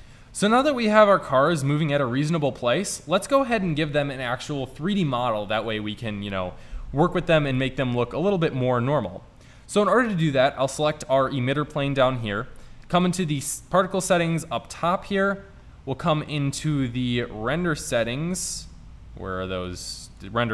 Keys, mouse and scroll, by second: 0.0 a, 2.6 middle click, 10.0 right click, 13.1 click, 14.4 drag, 19.8-20.5 drag.